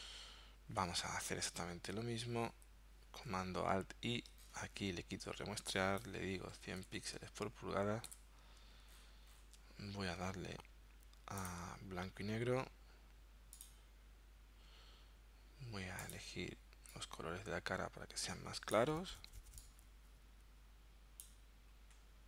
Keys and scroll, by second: 2.6 alt+super+i.